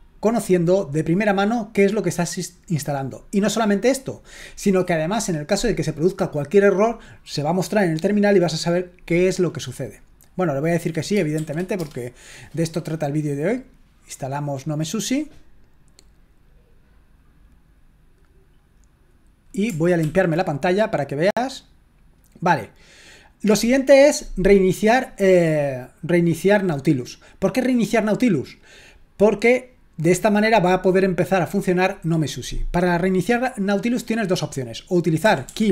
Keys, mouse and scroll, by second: 11.4 s, 11.8 Return, 20.0 ctrl+l, 35.0-35.7 typing.